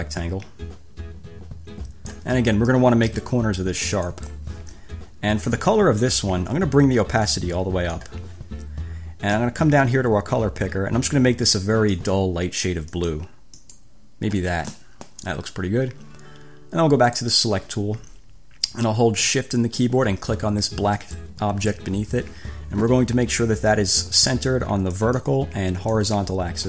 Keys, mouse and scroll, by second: 4.2 click, 7.4 click, 9.7-12.5 drag, 13.2 click, 13.9 click, 17.4 click, 21.2 shift+click, 25.1 click, 26.1 click.